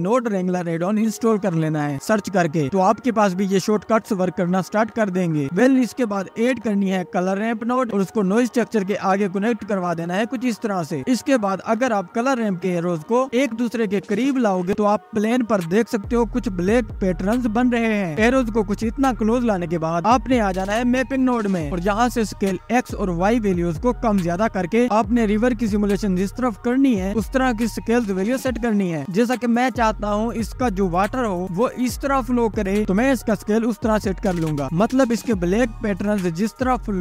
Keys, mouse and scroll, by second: 0.2 scroll down 1, 0.7 click, 6.6 shift+a, 9.4 click, 10.6-10.9 scroll down 1, 10.9 click, 11.9-12.5 scroll up 5, 12.5-14.7 drag, 14.7 Tab, 16.6-17.1 scroll up 1, 20.6 click, 20.7 middle click, 21.4-22.9 drag, 24.5-26.0 drag, 30.3-37.0 drag.